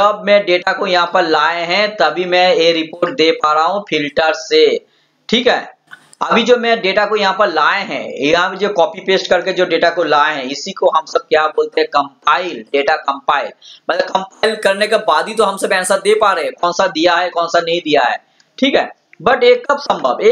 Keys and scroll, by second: 10.1 ctrl+shift+l.